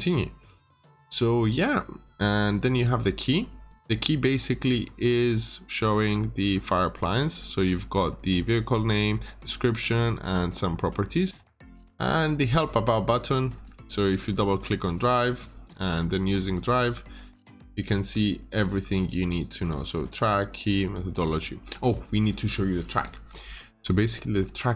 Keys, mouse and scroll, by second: 0.4 Escape, 2.3 click, 4.3 middle click, 5.0 scroll up 1, 6.4 click, 6.9-10.6 scroll up 1, 10.6 scroll down 1, 10.8 middle click, 11.3 Escape, 11.9 click, 14.9 double click, 15.8 click, 16.1 double click, 17.1 click, 18.9 double click, 20.5 click, 22.6-24.3 scroll down 1, 24.3 middle click.